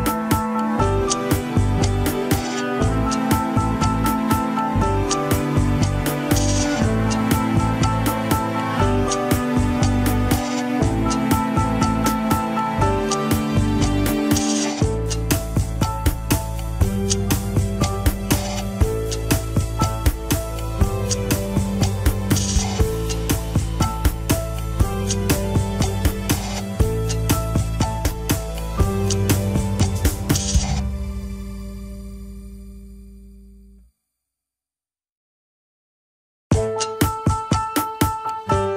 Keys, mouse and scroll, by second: 0.7 KP_1, 1.1 alt+z, 1.7 click, 2.1 alt+z, 2.3 shift+middle click, 2.5 scroll up 1, 2.6 alt+z, 2.9 alt+z, 3.7 click, 4.1 g, 4.8 alt+z, 5.4 click, 5.6 alt+z, 5.9 g, 6.8 alt+z, 7.1 click, 7.3 alt+z, 7.6 g, 8.6 alt+z, 10.0 alt+z, 10.2 scroll down 1, 10.4 ctrl+Tab, 11.0 ctrl+s, 11.5 scroll down 2, 17.4 scroll up 3, 17.7 shift+middle click, 18.1 Tab, 18.3 alt+z, 18.8 click, 19.1 alt+z, 19.3 scroll up 3, 19.6 g, 21.7 alt+z, 22.3-22.7 scroll down 2, 22.7 scroll up 2, 22.9 alt+z, 23.4 g, 24.2 alt+z, 24.6 alt+z, 24.9 ctrl+Tab, 25.1-25.6 scroll down 6, 25.6 click, 25.9 Tab, 26.9 alt+h, 27.0 click, 27.3 click, 28.2 l, 29.4 ctrl+i, 30.0 scroll down 2, 30.5-31.0 scroll up 5, 31.4 scroll down 5, 31.6 alt+z, 32.4 shift+h, 33.0 alt+z, 33.4 alt+z, 33.7 click, 34.7 click, 35.0-35.4 scroll up 5, 35.6 scroll up 5, 35.8 alt+z, 36.2 alt+z, 36.9 p, 37.7 Tab, 37.9 alt+z, 38.6 click.